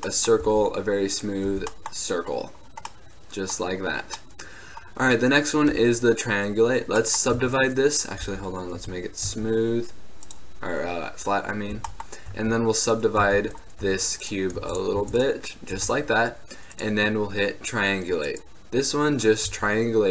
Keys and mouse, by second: 0.6 t, 1.6 t, 6.5-7.5 middle drag, 7.5 Tab, 8.4 t, 9.0 Tab, 9.4 Tab, 10.4-13.0 drag, 11.9 t, 12.4 w, 13.4 Tab, 13.9 w, 14.7 w, 15.1 w, 15.9 Tab, 19.6 z.